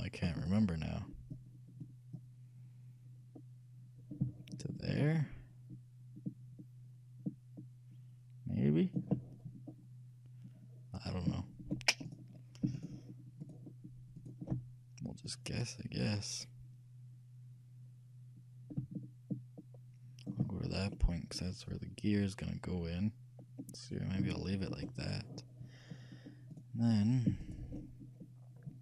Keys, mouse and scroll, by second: 0.5-2.4 right drag, 1.4-4.0 drag, 11.4 shift+middle click, 12.2-16.2 shift+right drag, 15.3-17.2 shift+drag, 21.1-22.8 middle drag, 24.5-26.6 shift+middle drag, 26.6-28.8 shift+right drag.